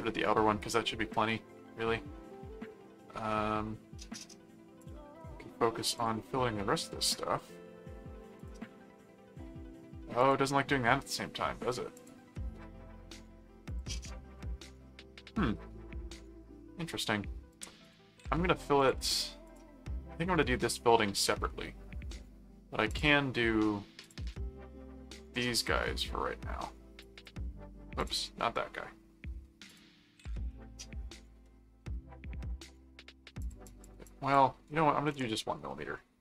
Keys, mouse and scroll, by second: 0.8-1.9 middle drag, 2.2 middle click, 3.5 middle click, 4.8 click, 6.0 click, 6.4-7.4 middle drag, 8.3 click, 10.2 click, 12.0 click, 13.6 click, 14.3-15.7 middle drag, 17.8 click, 18.7 click, 19.5 click, 21.5 middle click, 22.9 click, 24.0 click, 27.0 click, 28.0 click, 28.4 middle click, 29.7 click, 30.5 middle click, 31.4 middle click, 33.4 click, 36.0 middle click.